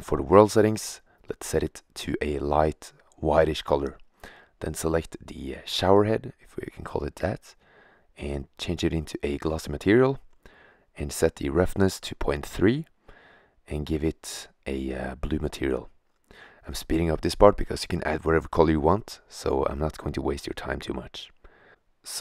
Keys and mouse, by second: 3.7 right click, 4.5-10.4 drag, 15.1-18.0 middle drag, 18.0-22.2 drag.